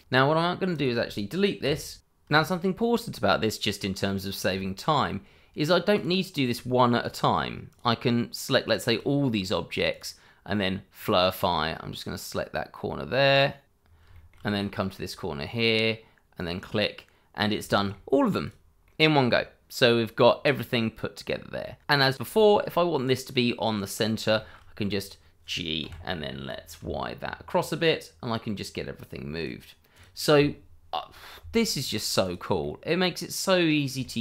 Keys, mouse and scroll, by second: 0.7 click, 1.6 Delete, 2.0-2.3 scroll down 1, 2.3 shift+middle click, 3.8 middle click, 4.2 scroll up 1, 4.5 shift+middle click, 5.9 click, 7.1 shift+click, 8.6 shift+click, 9.9 click, 13.6 click, 13.8 scroll down 1, 14.1 shift+middle click, 14.4-15.7 scroll up 1, 16.3 click, 17.3 scroll down 1, 17.7 shift+middle click, 18.0-18.4 scroll up 1, 18.4 click, 18.8 middle click, 20.1-20.6 scroll up 1, 20.6 middle click, 22.1 shift+middle click, 23.7 shift+middle click, 23.8 scroll down 1, 24.0 shift+middle click, 24.2-25.3 scroll up 1, 25.3 scroll down 1, 25.5 shift+middle click, 26.0 click, 26.7 g, 27.5 y, 29.5 click, 32.2 click, 32.6 middle click, 34.0 shift+middle click.